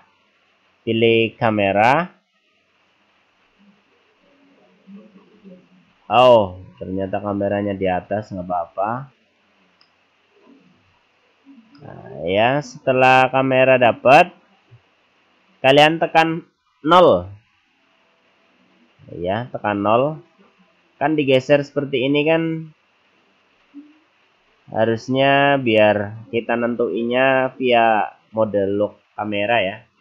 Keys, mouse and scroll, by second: 3.3-4.2 scroll down 5, 4.2-5.4 scroll up 1, 5.4-6.5 scroll down 4, 6.5-7.2 scroll up 3, 7.5 click, 10.0 middle click, 11.8 middle click, 12.7-14.8 scroll up 3, 17.3 KP_0, 19.6-20.3 scroll down 5, 20.5-20.9 scroll up 5, 20.9-21.2 scroll down 3, 21.2-21.9 scroll up 3, 21.9-22.6 scroll down 5, 22.6-23.1 scroll up 2, 23.5 scroll up 3, 24.4-24.8 scroll down 3, 25.0-25.9 scroll down 2, 25.9-26.7 scroll down 2.